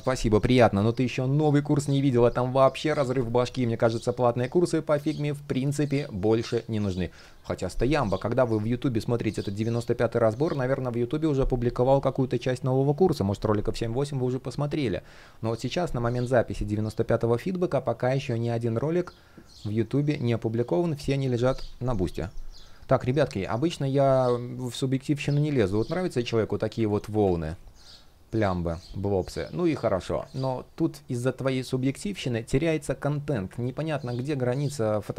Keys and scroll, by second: 30.0 super+z.